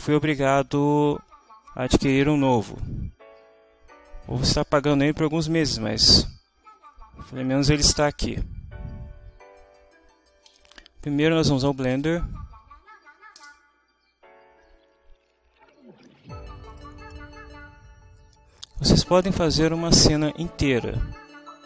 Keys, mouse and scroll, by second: 11.2-12.4 typing, 13.1 Down, 13.5 Return, 16.7 click, 18.8-21.6 drag.